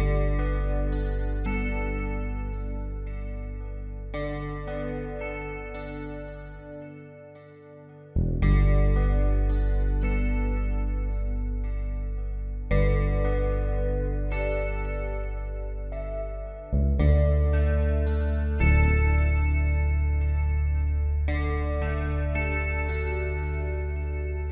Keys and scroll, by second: 0.3 b, 9.5 ctrl+i, 20.0 space.